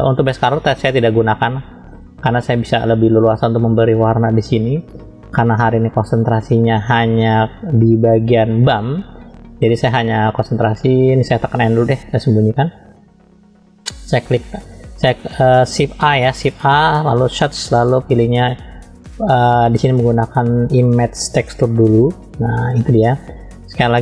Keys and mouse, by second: 11.6 n, 14.1 click, 16.4 shift+a.